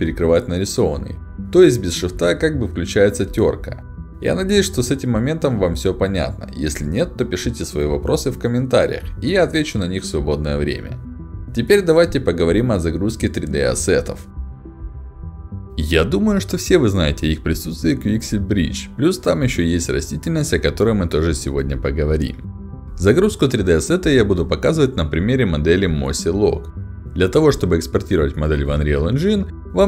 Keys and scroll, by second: 0.9-3.2 typing, 5.5 d, 8.5 d, 8.7 s, 13.1 d, 13.2 w, 13.3 a.